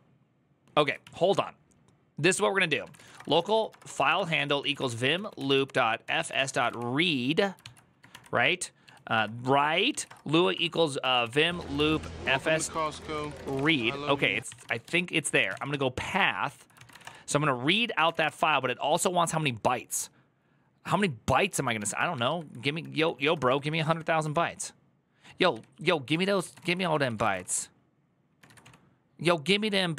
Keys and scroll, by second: 0.6 ctrl+c, 0.8 o, 2.4-18.3 typing, 16.2 ctrl+c, 22.7-23.4 typing, 25.9-29.9 typing, 26.7 ctrl+c.